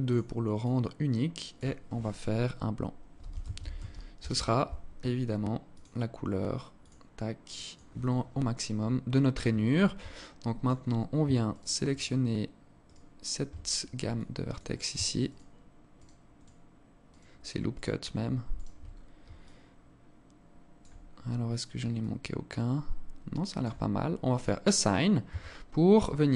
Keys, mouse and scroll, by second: 5.3 click, 8.4 scroll up 3, 9.7 alt+click, 10.2 scroll up 2, 11.1 alt+shift+right click, 11.5 alt+shift+right click, 13.9 alt+click, 14.9 alt+shift+right click, 15.6 alt+shift+right click, 16.1 alt+shift+right click, 17.5 alt+shift+right click, 18.5-18.9 scroll down 5, 19.0 alt+click, 20.7-21.3 scroll up 5, 21.6 alt+click, 23.9 click, 24.5-25.4 scroll down 5, 24.9 Tab, 25.8 alt+click, 25.8 scroll down 1.